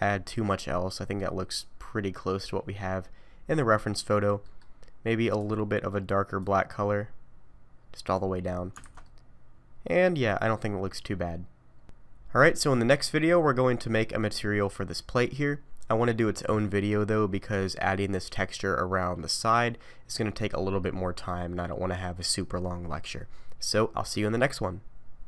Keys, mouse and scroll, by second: 0.1 middle click, 4.4 middle click, 5.3 click, 8.4 scroll down 2, 8.8 alt+a, 9.0 middle click, 17.4 middle click, 20.1 middle click, 21.0-23.2 scroll down 3.